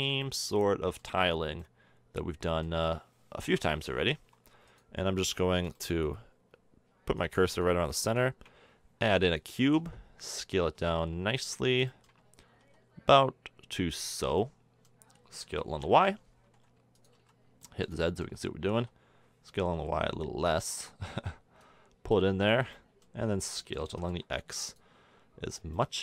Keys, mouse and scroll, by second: 2.4-2.9 middle drag, 3.4 KP_1, 4.7-5.9 drag, 5.9 a, 8.2 shift+a, 9.7 s, 10.6 s, 12.6 s, 14.8-15.5 middle drag, 15.5 s, 17.1 z, 17.7-18.7 middle drag, 18.7 s, 21.6-24.0 drag, 23.9 s, 25.1-25.7 middle drag.